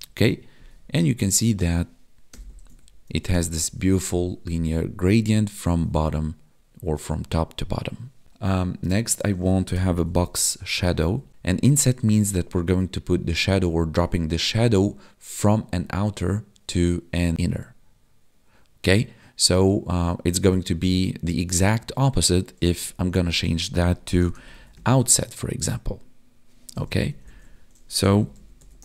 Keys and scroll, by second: 2.6 ctrl+d, 3.6 ctrl+s, 10.9 Down, 11.0 Tab, 23.1 ctrl+shift+Left, 27.1 ctrl+shift+Left.